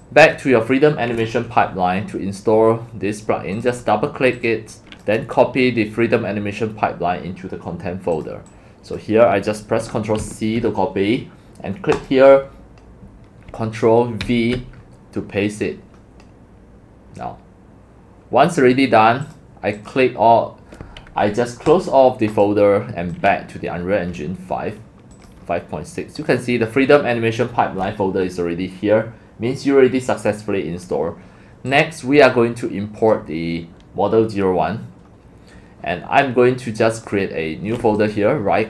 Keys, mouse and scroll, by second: 0.3 click, 4.3 click, 4.7 click, 8.1 click, 9.0 click, 10.2 ctrl+c, 11.9 click, 12.0 click, 12.1-14.2 drag, 14.2 ctrl+v, 19.3 click, 19.8 click, 21.7 click, 22.3 click, 23.1 click, 25.3 click, 31.7 drag, 32.4-33.5 drag, 37.0 click, 37.1-38.1 drag, 38.1 right click.